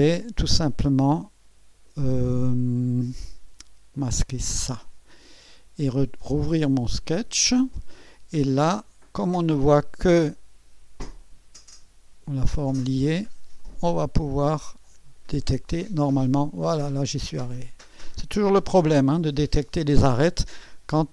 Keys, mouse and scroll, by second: 3.9 click, 4.5 space, 6.2-7.2 drag, 11.2 click, 13.6 click, 14.6 click, 15.7 click, 18.0 click, 18.7 click.